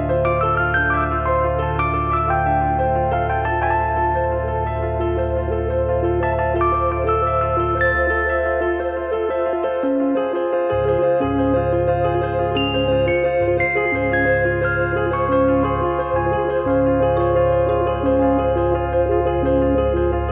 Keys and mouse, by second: 1.3 click, 1.6 click, 2.9 click, 3.6 click, 5.7 click, 6.9 click, 7.2 click, 7.9 click, 9.0 middle click, 12.9 3, 13.2 click, 13.4 click, 14.7 Delete, 15.2 KP_7, 15.4 KP_9, 15.8 shift+middle click, 16.6 1, 16.9 click, 18.6 click, 18.9 click.